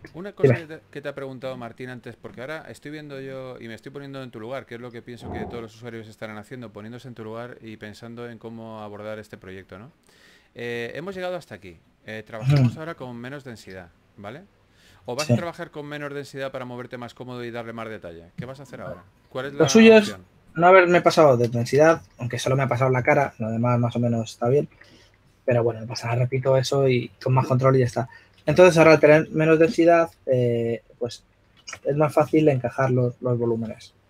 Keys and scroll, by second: 2.8 s, 5.9 s, 15.0-15.9 typing, 24.3 typing, 25.4 typing, 30.0-34.0 typing.